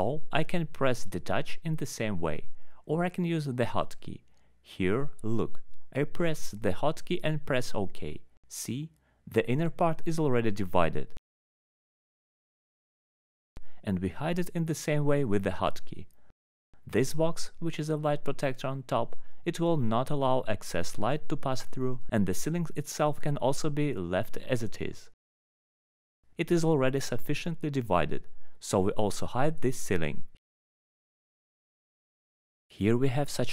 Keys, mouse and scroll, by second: 0.5 alt+middle click, 0.7 middle click, 0.7 click, 0.8 click, 2.3 alt+middle click, 2.5 click, 2.7 click, 2.9 alt+middle click, 3.4 alt+middle click, 6.0 ctrl+d, 7.2 click, 8.0 middle click, 9.1 click, 11.8 right click, 12.0 click, 12.3 click, 13.4 alt+h, 14.4 click, 15.1 alt+middle click, 15.6 click, 16.4 alt+middle click, 16.6 scroll down 1, 18.1 right click, 18.2 click, 19.2 scroll down 1, 20.4 alt+middle click, 21.3 alt+h, 21.8 click, 23.0 alt+middle click, 24.6 right click, 24.8 click, 25.8 alt+scroll up 1, 26.5 alt+middle click, 26.6 alt+scroll up 1, 26.8 alt+q, 27.4 scroll down 2, 27.7 F4, 27.7 alt+middle click, 29.6 alt+middle click, 29.7 alt+middle click, 30.4 alt+middle click, 31.4 click, 32.7 alt+h.